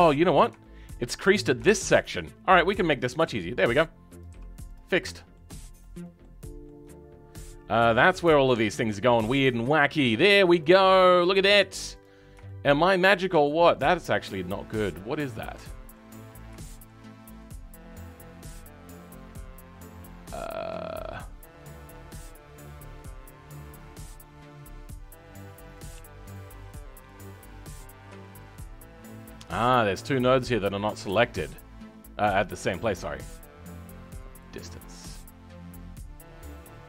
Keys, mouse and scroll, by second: 14.8-15.4 scroll up 2, 15.4 middle click, 16.1-16.5 scroll up 3, 16.5 shift+middle click, 17.0-17.3 scroll up 4, 17.3-27.0 middle drag, 27.0 click, 27.6-28.2 scroll up 2, 28.2-30.1 shift+middle drag, 30.1 click.